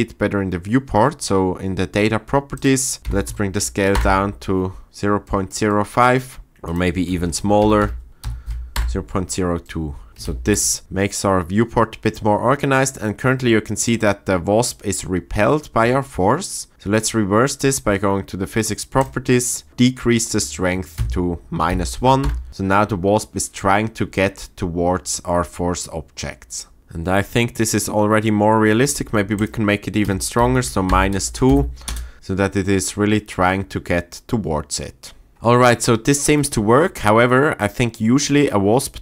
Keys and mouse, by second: 2.7-3.9 drag, 6.5-8.7 drag, 7.6 BackSpace, 9.6 middle click, 10.5 shift+Left, 10.8 space, 17.5 click, 19.0-22.3 drag, 26.8 space, 29.4-31.0 drag, 31.1 space, 31.5 shift+Left, 31.9 space, 35.3 space.